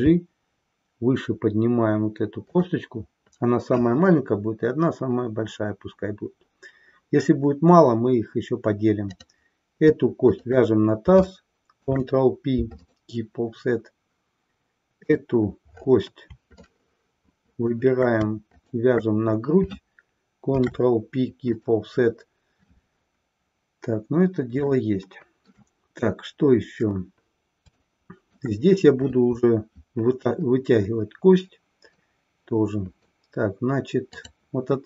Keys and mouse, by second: 2.6 click, 11.7 ctrl+p, 16.9-18.0 shift+middle drag, 18.6 shift+click, 20.5 ctrl+p, 24.6-25.6 shift+middle drag, 27.7 shift+middle click, 32.0-33.1 middle drag, 34.1 click.